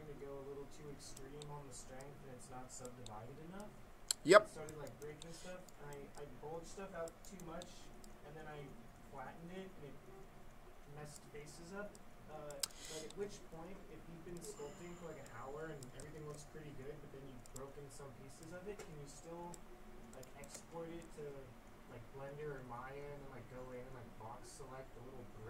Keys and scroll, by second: 16.1 ctrl+z.